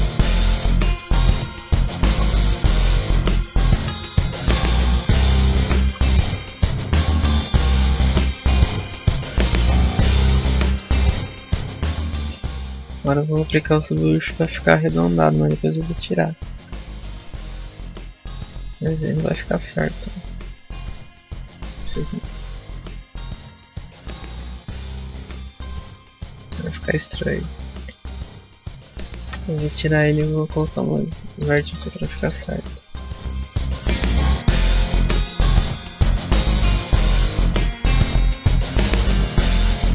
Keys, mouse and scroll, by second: 0.6 middle click, 1.3 z, 1.9 a, 2.3 z, 2.9 b, 4.6 click, 5.7 z, 6.1 Tab, 6.5 middle click, 7.6 a, 8.0 middle click, 8.6 scroll up 2, 8.9 Tab, 9.3 middle click, 10.0 Tab, 10.6 shift+middle click, 14.8 middle click, 25.2 middle click, 25.2 scroll down 2, 25.7-26.1 scroll up 3, 26.2 scroll down 1, 26.4 middle click, 27.1 Tab, 27.5 middle click, 27.9 Tab, 28.5 shift+middle click, 30.0 click, 30.5 middle click, 31.3 middle click, 31.6 Tab, 31.9 shift+middle click, 32.2 middle click, 32.4 a, 32.7 scroll up 1, 33.4 scroll down 1, 33.9 ctrl+r, 36.3 click, 36.5 ctrl+r, 37.6 click, 37.8 middle click, 38.2 shift+middle click, 38.5 middle click, 38.8-39.1 scroll up 1, 39.1 middle click.